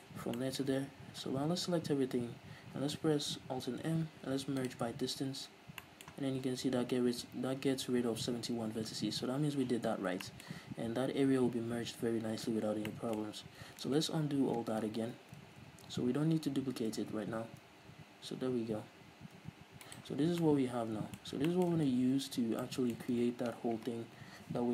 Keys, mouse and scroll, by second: 1.1-1.6 scroll down 1, 1.6 a, 3.8 alt+m, 5.4-5.8 scroll up 1, 6.3-9.9 middle drag, 14.1 ctrl+z, 19.4 g, 20.0 right click, 20.2 scroll down 1, 20.4 Tab, 20.5-24.7 middle drag, 21.3 scroll up 1, 22.0 ctrl+s, 22.5 scroll down 1, 23.3 ctrl+s.